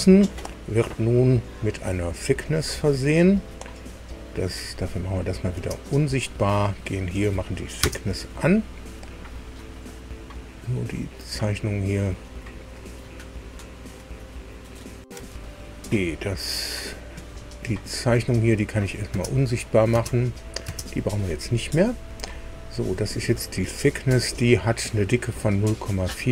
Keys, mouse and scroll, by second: 2.4 click, 5.0 click, 6.1 space, 6.6 click, 7.7 space, 11.0 click, 12.9 click, 15.4 ctrl+alt+Delete, 15.8 click, 16.8 click, 18.7 click, 19.1 space, 19.5 click, 19.9 space, 20.3 click, 20.6 space, 23.0-24.1 drag, 26.0-26.3 scroll up 2.